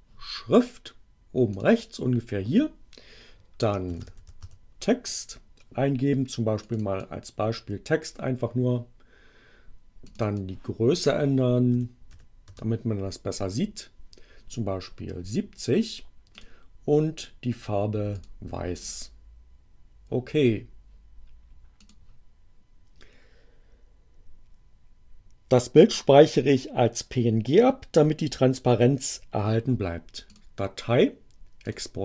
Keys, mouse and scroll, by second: 1.5 click, 3.6-4.9 typing, 6.5 click, 10.1 click, 11.7 7, 12.1 0, 12.5 Return, 16.3 click, 18.1 click, 18.8 click, 21.8 click, 30.3 click, 31.7 click.